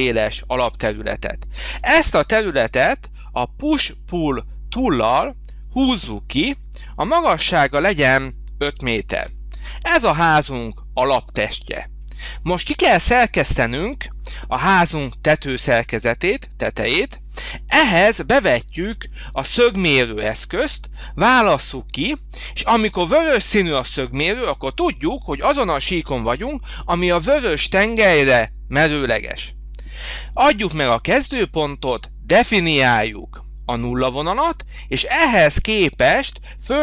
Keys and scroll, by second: 0.8 Return, 8.7 5, 9.2 Return.